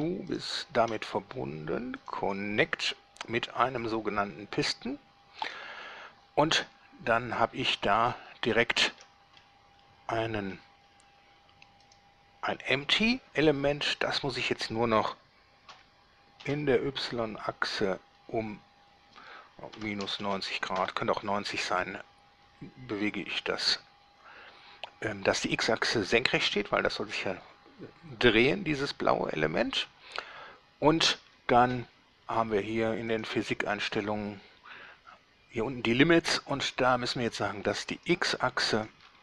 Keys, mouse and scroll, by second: 0.5 shift+right click, 2.2 click, 4.0 click, 5.7 click, 7.0 scroll up 1, 7.3-8.5 middle drag, 8.8 shift+middle click, 9.1-9.4 shift+scroll down 1, 9.5-10.9 shift+middle drag, 11.1-11.5 scroll up 1, 12.1 right click, 15.9 r, 16.7 y, 20.0 -, 20.2 9, 20.4 0, 21.0 Return, 24.2 scroll down 2, 28.5 scroll down 2, 33.3 click, 38.1 click, 39.0 click.